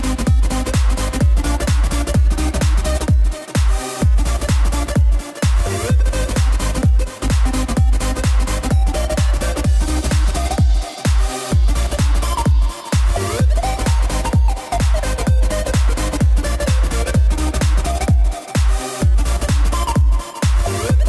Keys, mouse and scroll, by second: 5.8 s, 9.4 Tab, 9.6 click, 9.8 z, 10.2 click, 10.5 scroll down 4, 10.7-11.8 middle drag, 11.8 scroll down 1, 12.0-12.5 middle drag, 12.5 KP_0, 13.3-14.7 scroll up 1, 15.1 KP_1, 16.1 shift+a, 17.5 click, 17.7-18.2 scroll up 3, 18.2 shift+middle drag, 18.5 scroll down 1, 18.5-19.0 scroll up 2, 19.1-19.8 middle drag, 19.8 scroll down 1, 20.2 scroll up 1, 20.2-20.9 middle drag, 20.9 click.